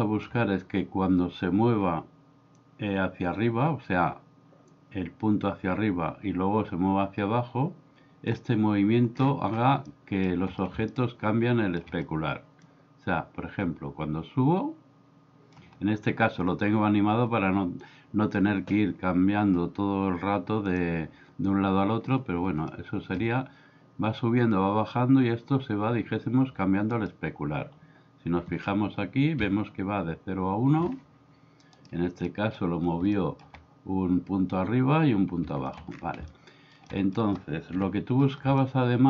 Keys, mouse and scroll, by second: 2.6-8.4 drag, 9.9-10.3 middle drag, 10.9-11.8 middle drag, 12.7-15.5 drag, 20.8 click, 22.7-23.1 shift+middle drag, 29.4 Escape, 32.3 middle drag, 33.2 middle click, 35.7 middle click, 36.3-36.8 middle drag, 36.9-37.2 middle drag, 37.7 KP_1, 38.6-39.0 middle drag.